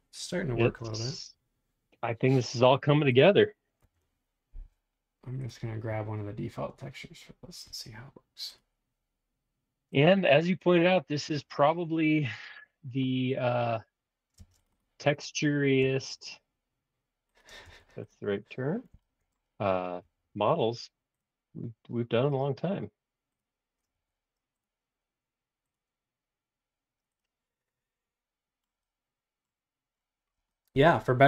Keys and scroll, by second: 10.7 Escape, 10.7 space, 14.3 space, 15.8 b, 17.5 space, 17.6 ↺, 23.9 Escape.